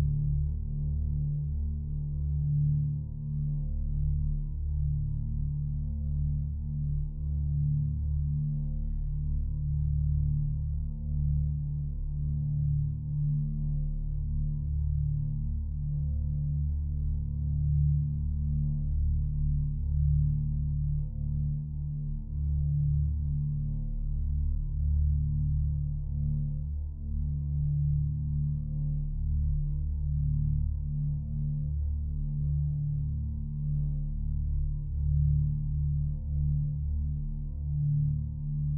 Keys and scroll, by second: 16.9 s.